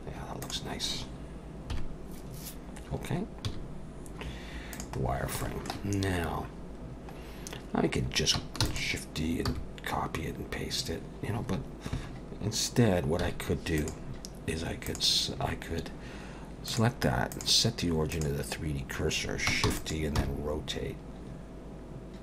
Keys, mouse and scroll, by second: 0.4 click, 1.7 KP_1, 3.5 z, 5.0-5.4 scroll down 3, 5.4 shift+middle click, 5.9-6.5 scroll up 2, 6.6 scroll down 1, 7.2 scroll up 1, 8.6 shift+d, 9.5 g, 13.2 x, 14.9 click, 16.7 click, 19.7 shift+d, 20.2 r.